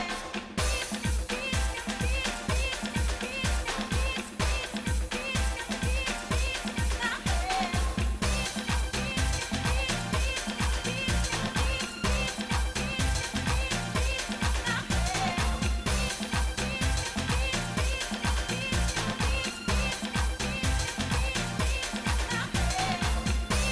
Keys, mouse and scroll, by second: 1.6 shift+middle click, 10.5 scroll up 2, 18.8 scroll down 2, 19.8-21.4 shift+middle drag, 21.5 shift+middle click, 22.8-23.3 scroll down 2, 23.5 shift+middle click.